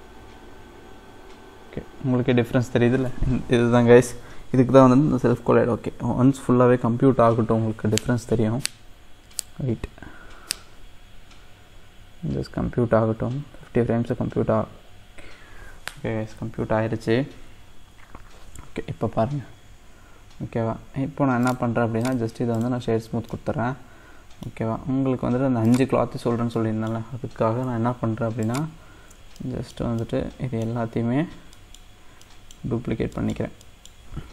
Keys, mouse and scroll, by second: 21.5 click, 22.0-23.3 right drag, 23.3-24.6 middle drag, 24.6 scroll down 2, 25.6 click, 26.2 scroll up 2, 26.6 middle click, 27.0-28.4 scroll down 1, 28.4 shift+click, 29.4-31.9 middle drag, 31.9 scroll down 2, 32.3 middle click, 32.8-33.1 scroll up 1, 33.1-34.3 middle drag.